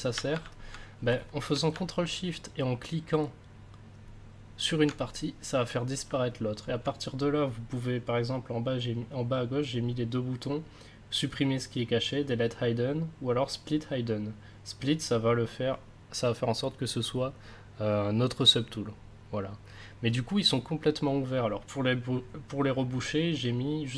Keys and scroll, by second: 1.7 ctrl+s.